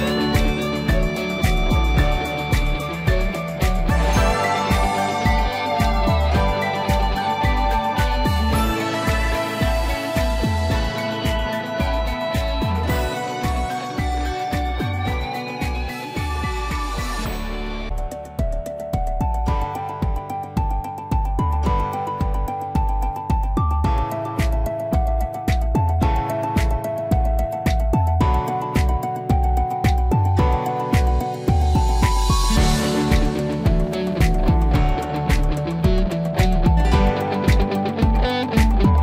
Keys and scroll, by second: 30.8 Up.